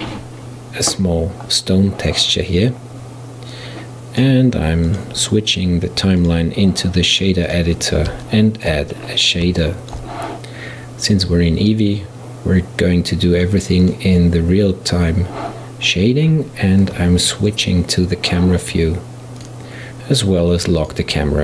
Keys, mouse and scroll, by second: 3.6-8.3 drag, 8.3-9.1 shift+middle drag, 9.1-9.7 scroll up 1, 9.7-14.7 shift+middle drag, 14.7 click, 17.0 KP_0, 19.4 click, 20.9 click.